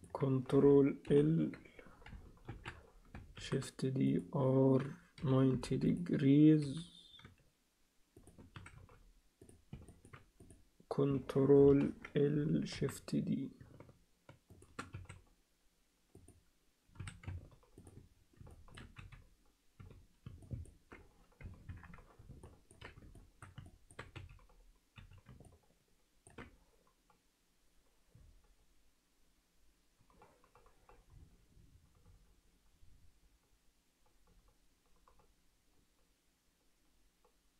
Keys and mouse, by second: 0.0 click, 1.0 ctrl+:, 2.5 ctrl+l, 3.4 shift+d, 5.2 r, 6.6 g, 8.5 s, 11.7 ctrl+l, 12.8 shift+d, 14.9 s, 17.0 s, 18.6 alt+shift+middle click, 19.0 z, 19.8 z, 20.6 alt+middle click, 22.6 ctrl+alt+middle click, 23.3 alt+shift+middle click, 23.7 ctrl+alt+middle click, 24.1 z, 24.9 z, 25.6 ctrl+alt+middle click.